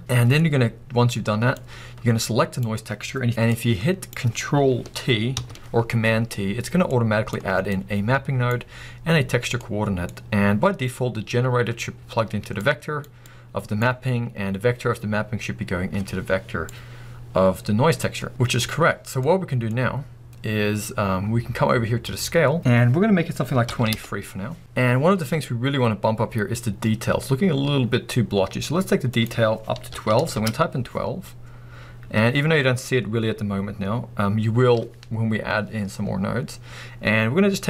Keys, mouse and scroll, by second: 0.0-6.9 drag, 3.3 ctrl+shift+t, 5.3 ctrl+t, 6.6 scroll down 1, 6.9-16.7 middle drag, 16.7-21.7 drag, 24.1 Return, 25.7-26.4 scroll up 1, 30.3 click, 30.6 Return, 34.8-37.6 drag.